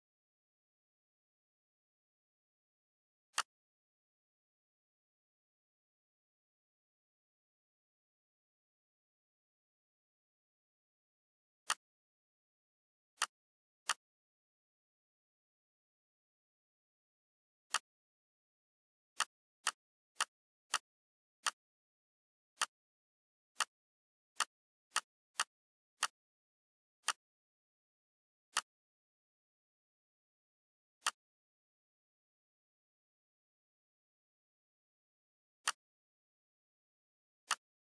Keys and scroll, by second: 1.7 z, 5.4 Right, 6.7 Left, 7.1 Right, 9.1 F4, 14.7 ctrl+a, 16.0 ctrl+g, 30.2 shift+F4.